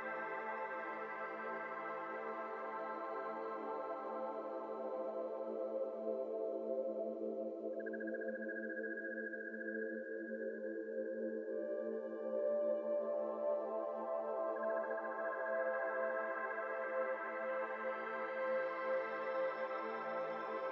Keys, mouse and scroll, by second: 0.0 click, 1.3 middle click, 1.6 g, 2.2 z, 2.8 middle click, 3.3 g, 5.4 z, 5.9 ctrl+z, 7.7 click, 8.4-9.4 middle drag, 9.4 click, 10.2-10.5 middle drag, 10.5 click, 10.7-11.2 middle drag, 11.2 click, 12.3 ctrl+a, 12.9 click, 13.1 Tab, 13.5 Tab, 13.7 click, 14.0 x, 14.9 click, 15.3 x, 15.7-17.2 scroll down 8, 15.7-16.1 middle drag, 16.2 middle drag, 16.7 click, 17.2-19.6 shift+middle drag, 19.6-20.3 scroll down 7, 20.3-20.7 scroll up 5.